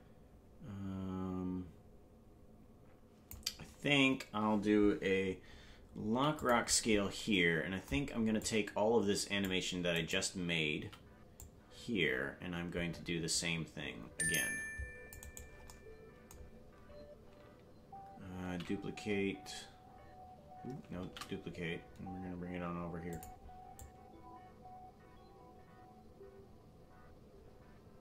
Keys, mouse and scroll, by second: 8.4-9.5 drag, 9.9 right click, 10.7 c, 18.4 ctrl+d, 21.0 shift+d, 23.8-28.0 drag.